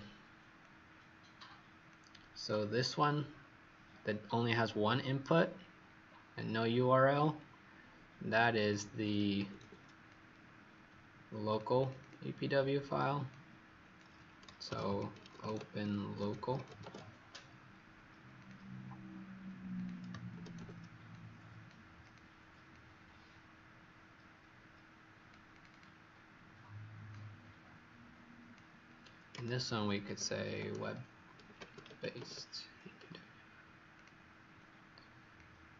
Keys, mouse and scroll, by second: 0.6 click, 3.4-5.1 scroll up 2, 6.0-8.5 scroll down 1, 8.5 click, 9.3 ctrl+c, 11.9 click, 13.2 click, 14.4-17.1 typing, 18.4 click, 20.3 ctrl+c, 25.7 click, 27.0 click, 29.6-32.6 typing, 33.9 click.